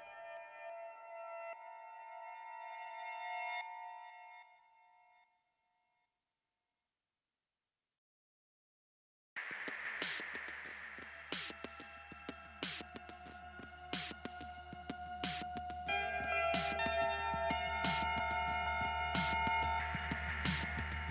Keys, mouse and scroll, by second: 0.3 scroll up 2, 1.5 click, 1.7 click, 2.6 click, 2.7 click, 2.8 click, 4.4 click, 5.1 scroll down 1, 10.3 click, 16.1-17.0 scroll up 1, 17.7 right click, 17.8 right click, 18.2 click, 20.7 click.